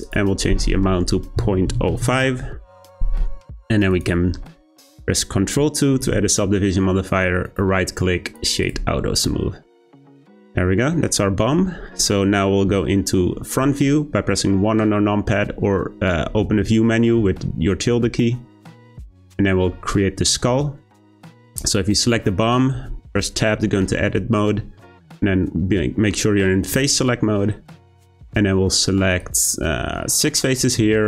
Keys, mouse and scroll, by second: 0.0-3.0 drag, 3.9 click, 6.0 ctrl+2, 7.4-8.6 right drag, 8.6 click, 9.0 scroll down 2, 9.2-12.2 middle drag, 12.6 `, 14.4-16.5 scroll up 3, 19.5-20.9 scroll up 1, 20.9 click, 22.7 Tab, 29.1 click.